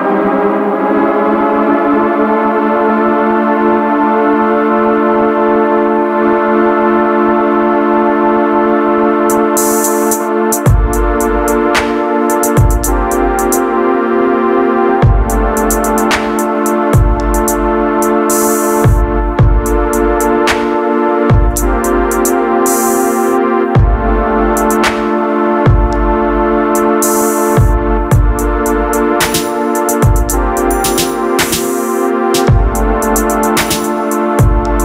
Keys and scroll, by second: 34.0 ctrl+z.